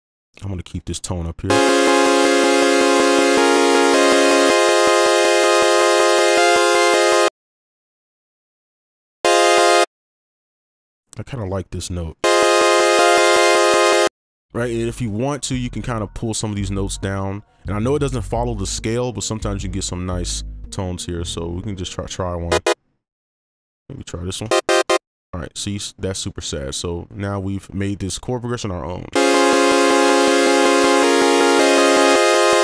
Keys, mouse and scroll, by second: 0.2 shift+click, 0.8 shift+right click, 7.2 space, 7.4 ctrl+click, 9.2 alt+right click, 10.2 right click, 10.7 ctrl+click, 11.4 right click, 14.0 space, 15.9 space, 16.2 ctrl+click, 22.4 alt+right click, 22.6 alt+right click, 23.5 ctrl+click, 24.2 shift+Down, 24.4 alt+right click, 24.8 alt+right click.